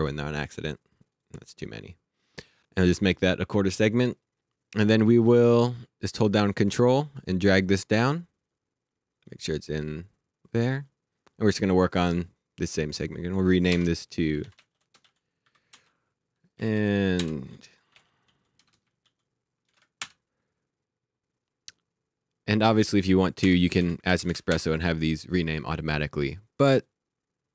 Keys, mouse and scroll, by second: 0.3 right click, 0.8 click, 2.5 click, 6.1 click, 12.0 click, 13.0 click, 13.7 Return, 14.1-15.9 typing, 16.5 Down, 17.1 Return, 17.5-19.7 typing, 20.0 Return, 22.8 click, 23.4 Return, 23.7 Right, 24.1 Left, 24.3 space, 24.5 Return, 26.7 click.